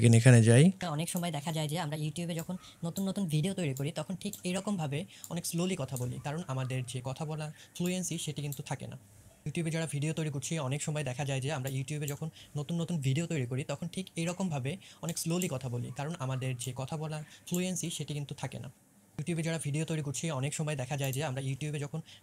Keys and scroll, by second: 0.8 space.